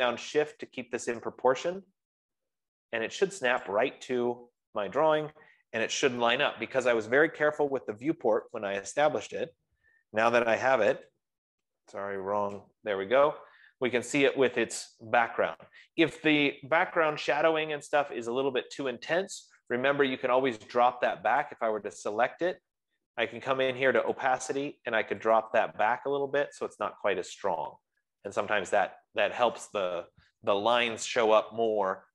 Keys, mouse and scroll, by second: 4.0 shift+click, 6.3 0, 8.9 click, 9.9 click, 10.0 shift+click, 11.4 0, 12.8 ctrl+0, 20.1 click, 21.9 click, 24.6 click, 24.8 F15, 25.7 click, 28.7 click.